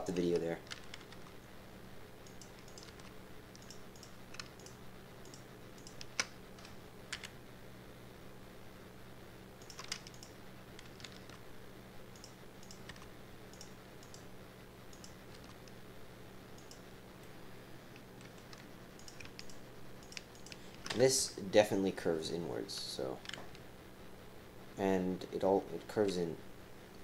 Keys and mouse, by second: 1.1-5.1 typing, 2.6 click, 3.9 click, 4.5 shift+click, 5.2 click, 5.8 click, 7.1 e, 10.0-13.2 typing, 10.1 click, 12.6 click, 14.0 click, 14.9 click, 15.3 g, 17.2 click, 18.9 click, 19.4 shift+click, 20.0 shift+click, 21.2 KP_1.